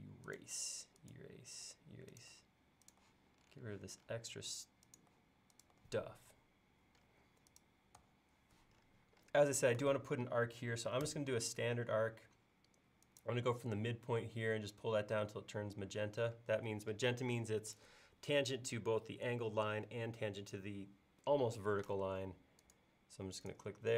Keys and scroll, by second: 1.7 BackSpace, 5.1 BackSpace, 8.0 BackSpace, 11.1 a.